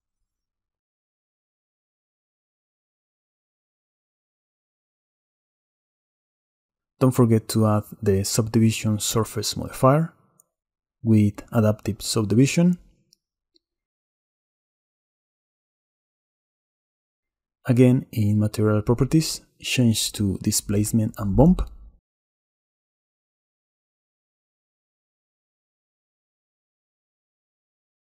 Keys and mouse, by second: 0.8-2.1 drag, 5.7 click, 7.3-8.9 drag, 8.9-11.3 middle drag, 13.2 middle click, 14.2 middle click, 18.3 middle click, 20.8-22.2 middle drag, 23.4-23.9 middle drag, 24.0 shift+middle click, 25.9 click.